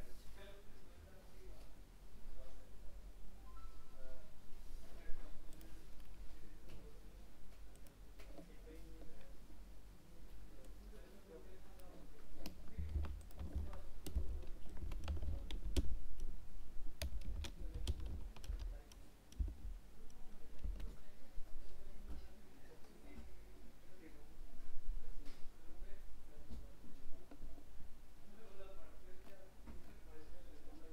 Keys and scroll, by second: 13.0 ctrl+c, 13.5 ctrl+v.